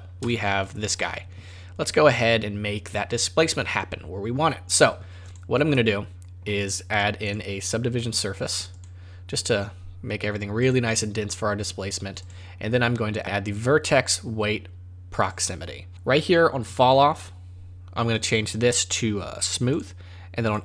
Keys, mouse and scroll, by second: 0.3 shift+middle click, 5.2 click, 5.7 middle click, 6.9 click, 7.3 click, 10.6 click, 12.2 click, 18.1 click, 20.5 click.